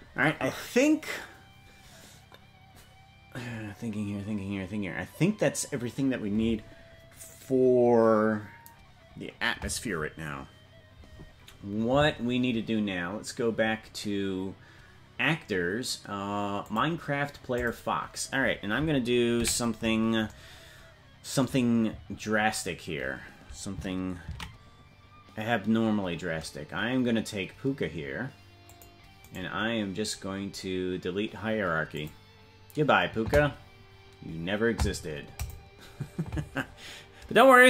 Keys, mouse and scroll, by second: 28.7 ctrl+s, 28.7-33.7 drag.